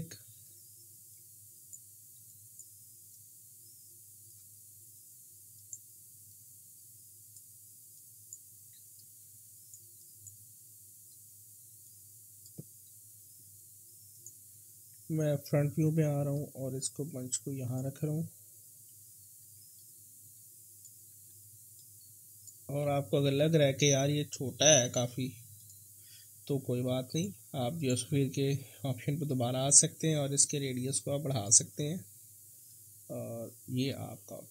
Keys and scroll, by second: 14.9 f, 16.1 f, 19.3 e, 21.1 w.